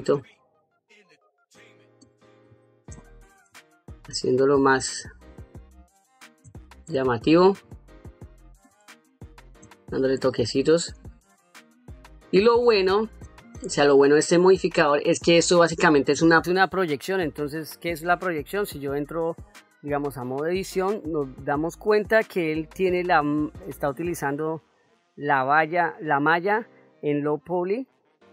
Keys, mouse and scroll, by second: 0.2 shift+click, 0.7 shift+click, 1.2 shift+click, 1.7 shift+click, 2.1 shift+click, 2.7 middle click, 3.8 shift+click, 5.0 shift+click, 5.5 shift+click, 6.2 middle click, 7.0 shift+click, 7.9 shift+click, 8.3 shift+click, 8.9 shift+click, 9.4 middle click, 10.4 shift+click, 11.0 shift+click, 11.7 shift+click, 12.3 shift+click, 13.0 middle click, 13.8 shift+click, 14.5 middle click, 16.4 shift+click, 16.9 middle click, 20.2 Tab, 23.6 middle click, 24.9 ctrl+middle click, 26.7 middle click, 27.4 middle click.